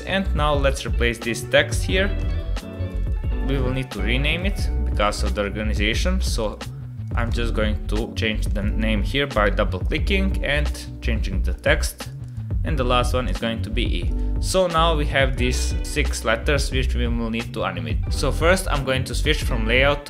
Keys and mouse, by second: 2.9-4.3 drag, 4.9-6.4 drag, 7.0-8.1 drag, 8.5-9.9 drag, 10.5 click, 12.1-13.4 drag, 14.0 click, 15.7 click.